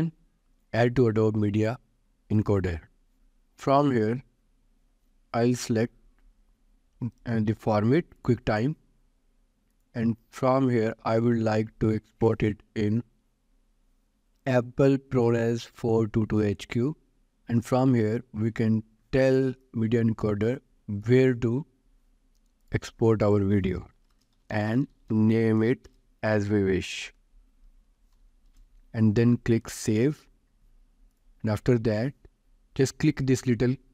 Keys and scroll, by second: 24.4-26.3 typing, 28.6 shift+h, 28.9 shift+r.